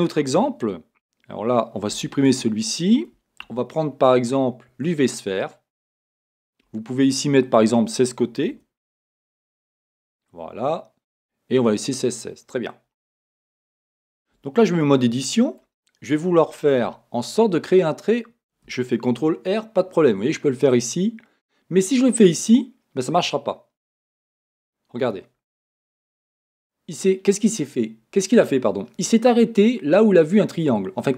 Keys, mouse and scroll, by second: 1.9 x, 3.4 shift+a, 5.3-5.7 scroll, 5.7-7.4 middle drag, 7.4-12.0 drag, 10.2 Return, 12.0-13.3 middle drag, 13.3-14.0 scroll up 1, 14.9 Tab, 15.3 middle click, 15.8-16.8 scroll up 1, 16.8 a, 19.1 ctrl+r, 25.1 click, 25.8-31.1 middle drag, 29.6-31.1 scroll up 2.